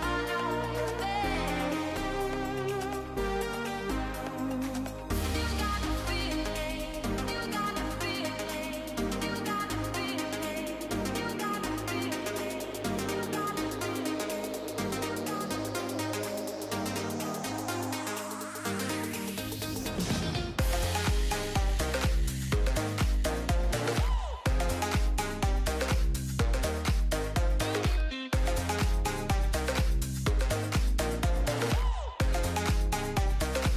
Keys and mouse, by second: 10.5 ctrl+s, 13.5 ctrl+shift+click, 15.6-18.7 shift+drag, 19.6-20.7 drag, 21.7-22.8 middle drag, 23.3 ctrl+shift+click, 25.5 middle click, 28.1-30.8 shift+drag, 31.0-33.7 drag.